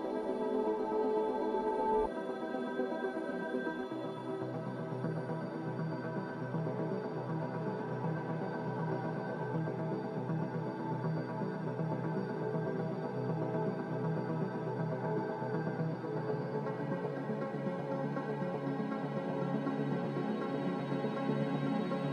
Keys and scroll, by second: 8.1 ctrl+z, 11.5 ctrl+z, 13.2-14.0 typing, 16.8 ctrl+z, 20.3-21.0 typing.